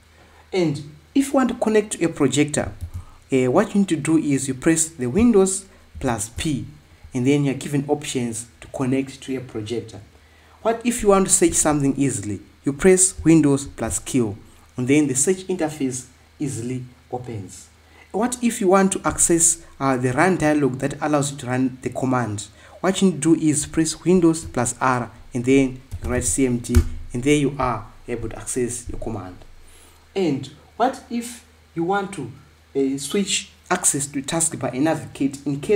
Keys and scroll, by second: 3.6 super+d, 14.5 super+q, 19.8 Escape, 25.0 super+r, 26.0-26.9 typing, 27.0 Return.